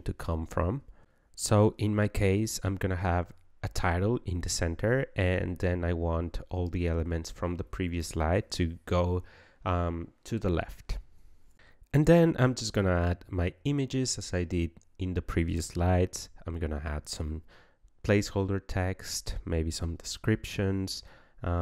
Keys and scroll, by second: 15.5-17.7 typing, 16.1 ctrl+a, 19.4 ctrl+z, 19.8 ctrl+z.